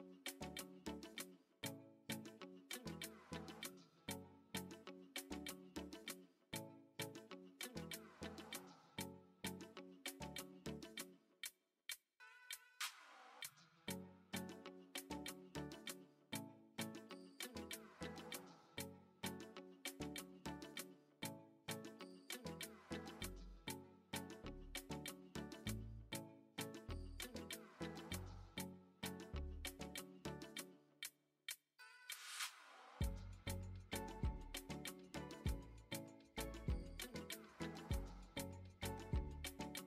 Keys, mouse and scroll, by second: 1.3-1.7 middle drag, 2.1 Tab, 2.5 click, 7.4 middle click, 7.8 shift+middle click, 9.3 click, 13.0 2, 13.2 click, 14.1 shift+d, 23.9-27.1 drag, 28.2 shift+s, 32.3 Tab, 33.6 Tab, 34.7 x, 38.0 x, 39.6 Tab.